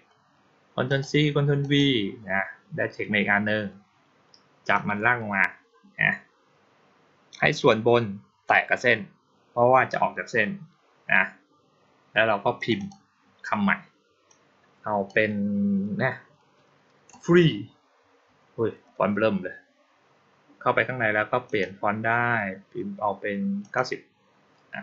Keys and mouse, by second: 0.7 click, 1.5 click, 4.6-8.3 drag, 12.4 click, 12.6 click, 14.1 click, 21.3 click, 23.5 click.